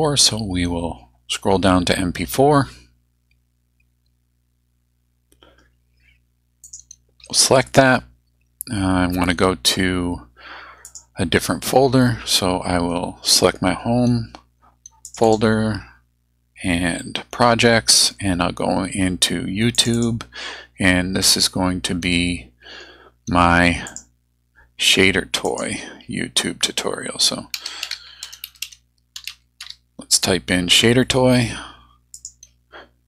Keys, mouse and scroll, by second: 6.6 click, 10.9 click, 15.1 click, 19.8 click, 23.9 click, 25.4 click, 27.3-30.1 typing, 32.1 click.